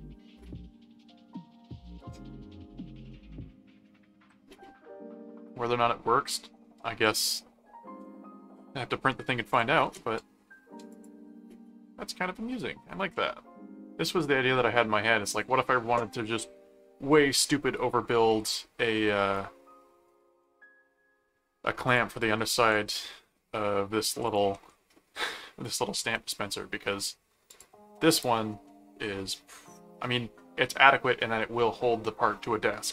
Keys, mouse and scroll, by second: 9.5 ctrl+click, 9.8 ctrl+s, 10.9 click, 13.1 middle click, 19.3 middle click, 20.6-21.6 middle drag, 21.8 click, 22.7 ctrl+Tab, 24.2 ctrl+click, 26.0 ctrl+Tab, 27.5 ctrl+click, 28.6-30.2 middle drag.